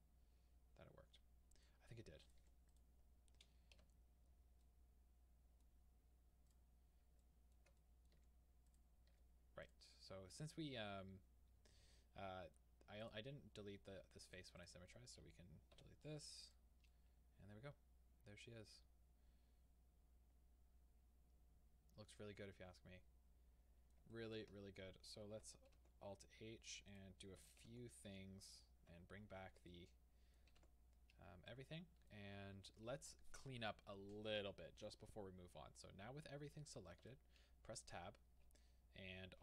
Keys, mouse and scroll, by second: 2.3 click, 2.5 Tab, 2.8 click, 3.5 scroll down 1, 3.8-6.5 middle drag, 3.8 h, 4.2-4.6 scroll up 2, 6.5 click, 6.8-7.3 scroll up 1, 7.3-8.8 shift+middle drag, 8.8 click, 9.1 Tab, 9.7 click, 10.4-13.1 middle drag, 13.1 click, 14.3 click, 16.5 x, 16.9-27.0 middle drag, 24.6-25.7 scroll down 1, 27.0-28.1 drag, 28.1 Tab, 29.7-39.4 middle drag, 30.6 alt+h, 30.9 scroll down 1, 35.8-37.1 scroll down 1, 37.1 Tab.